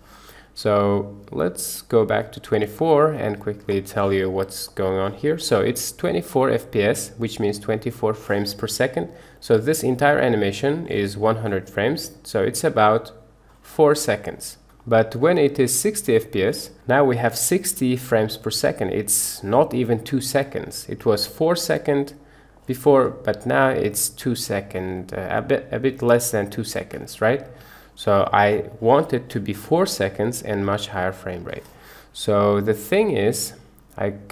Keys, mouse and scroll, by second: 1.7-2.7 drag, 4.8 middle click, 9.4-10.9 drag, 12.1 click, 15.1-16.3 drag, 17.1-19.3 drag, 21.1-22.6 drag, 22.9 space, 24.8 Escape, 26.8 space, 27.6 Escape, 28.7-30.1 drag, 30.6 space, 31.5 Escape.